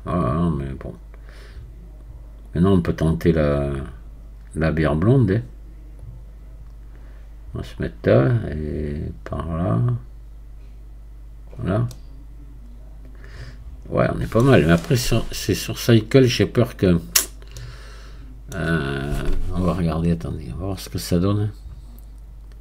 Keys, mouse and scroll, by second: 11.9-16.2 middle drag, 16.2-17.3 drag, 17.4 scroll down 1, 17.6-20.6 middle drag.